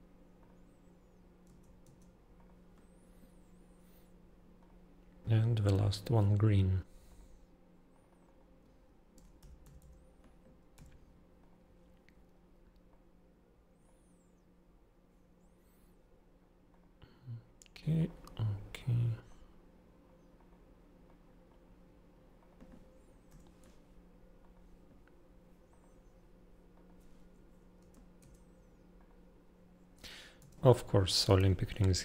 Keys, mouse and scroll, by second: 0.4 click, 1.4 Tab, 1.8 Tab, 2.3 click, 4.5 click, 5.7 click, 7.0 click, 7.9 click, 8.0 click, 8.2 click, 9.1-10.7 typing, 11.3 click, 12.9 click, 16.7 click, 18.0 click, 19.2 click, 20.3 click, 21.0 click, 22.3 click, 23.5 0, 24.4 click, 25.6 click, 26.7 click, 28.0 Tab, 28.3 Tab, 28.9 click, 29.9 Tab, 30.3 Tab, 30.8 click.